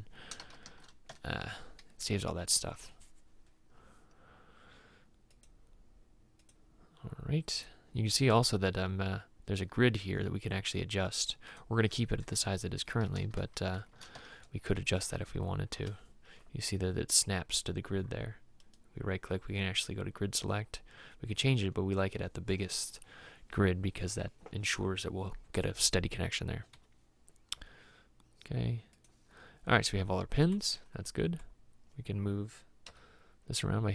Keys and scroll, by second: 0.6 shift+i, 0.7 shift+s, 1.1 Tab, 1.6 7, 13.5 shift+v, 13.8 shift+c, 14.1 Tab, 15.1 8, 15.9 Return, 26.9 Escape, 27.6 Escape, 33.0 m.